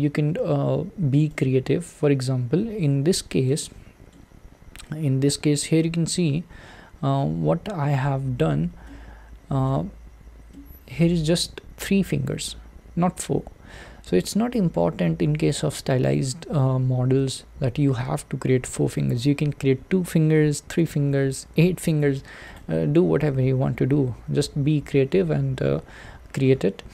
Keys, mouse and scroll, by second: 1.4 click, 2.7-3.5 scroll down 4, 3.5-4.5 middle drag, 4.5-5.6 scroll up 4, 5.6 click, 8.1-8.7 scroll up 3, 9.1-14.1 shift+middle drag, 14.1 scroll down 3, 14.9-15.7 scroll down 1, 15.7-16.9 scroll down 1, 16.9-17.7 scroll down 1, 17.7-18.8 scroll down 1, 23.0-26.9 drag.